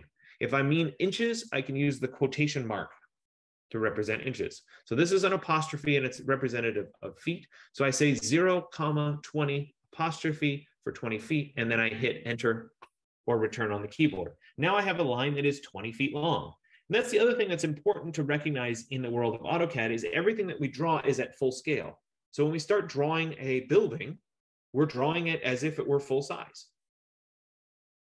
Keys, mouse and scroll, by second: 12.5 Return.